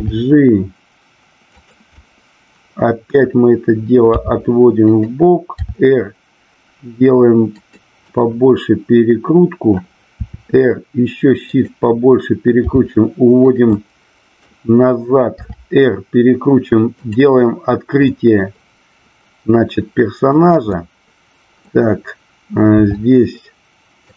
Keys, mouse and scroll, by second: 0.0 g, 1.5 click, 2.0-3.1 middle drag, 4.8 click, 7.5 click, 8.0-9.8 middle drag, 10.2 r, 11.4 click, 12.6 g, 13.4 click, 13.7 middle click, 16.9 click, 17.9-20.2 middle drag, 20.7 middle click, 22.8 r.